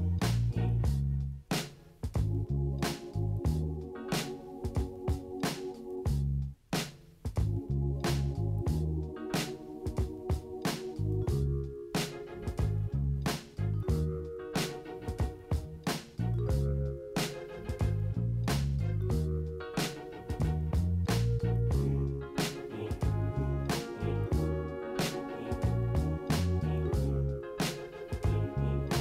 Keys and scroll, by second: 1.4 ctrl+d, 13.4 ctrl+d, 15.6 ctrl+j, 18.9 ctrl+space, 19.5 ctrl+space, 20.0 ctrl+space, 21.2 ctrl+space.